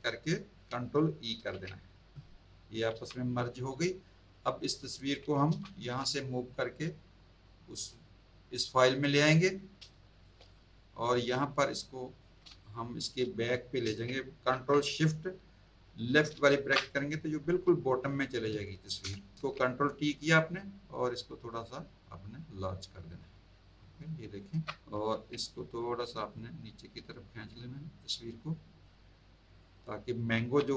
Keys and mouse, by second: 1.3 ctrl+e, 3.4 click, 4.9 click, 6.5 click, 9.8 space, 9.9 click, 12.5 space, 12.6 click, 16.3 ctrl+shift+[, 19.3 ctrl+t, 20.5 click, 24.9 ctrl+t, 26.3 click, 29.5 click, 30.4 z, 30.6 click.